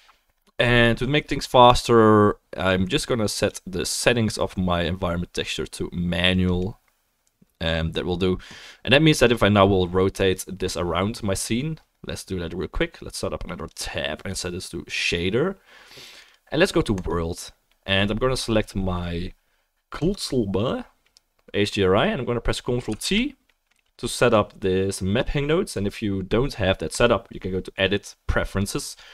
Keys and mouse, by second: 3.4-20.1 drag, 10.5-28.7 middle drag, 23.0 ctrl+t, 26.9-28.7 drag.